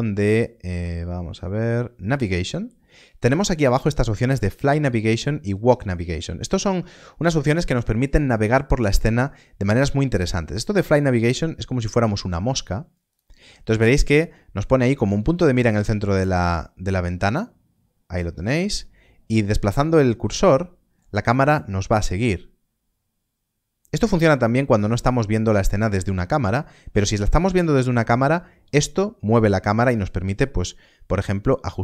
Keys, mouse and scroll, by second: 13.2 click.